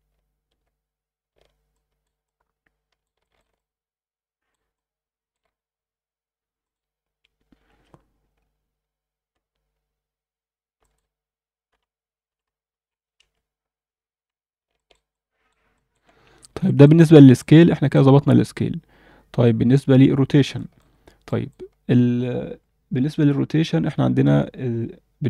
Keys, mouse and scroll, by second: 1.7 alt+middle drag, 2.2-3.0 alt+middle drag, 3.2 alt+shift+middle click, 3.6-4.5 alt+middle drag, 4.7-5.3 alt+middle drag, 5.5 scroll up 2, 6.6-7.8 drag, 10.8-13.2 drag, 14.8 alt+middle click, 15.1-15.5 alt+middle drag, 15.7 alt+middle click, 16.3 scroll down 1, 16.6 alt+shift+middle click, 17.0 alt+a, 17.4-17.9 alt+middle drag, 18.4-18.8 scroll up 1, 20.5 alt+shift+middle click, 21.3 click, 24.5 scroll down 2.